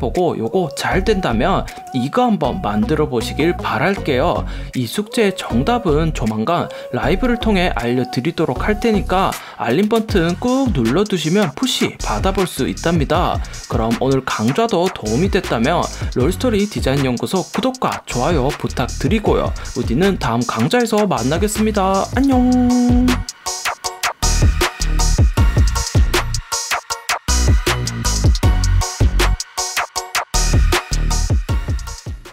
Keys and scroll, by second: 2.1 Down.